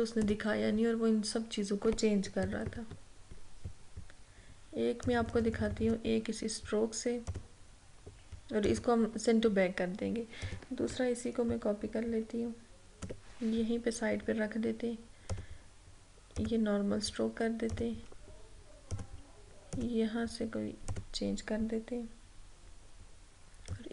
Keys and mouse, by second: 2.3 click, 2.5 ctrl+=, 5.1-15.4 drag, 23.7-23.9 drag.